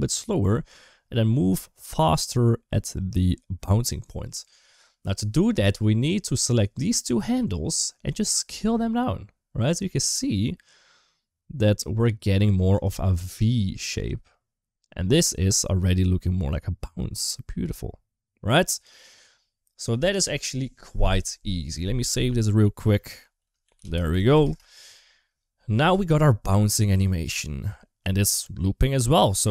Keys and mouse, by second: 6.4 click, 6.5-7.3 drag, 8.3 s, 20.0 space, 21.9 ctrl+s, 25.6 space, 29.0 space.